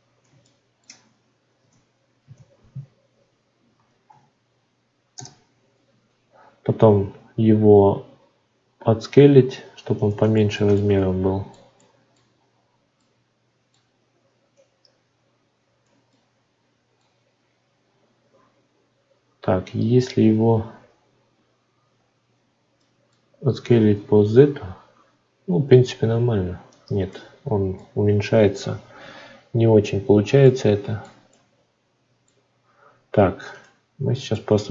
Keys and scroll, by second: 5.1 Return, 18.3 Tab.